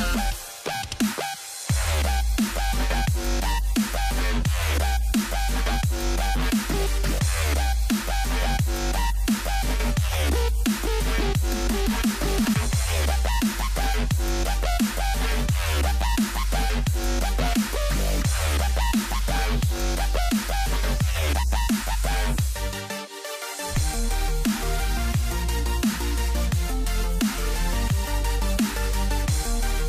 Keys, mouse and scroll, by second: 1.0 g, 3.9 shift+a, 6.7 a, 12.5 e, 18.3 z, 21.2-26.7 middle drag, 26.7 c, 29.5 e.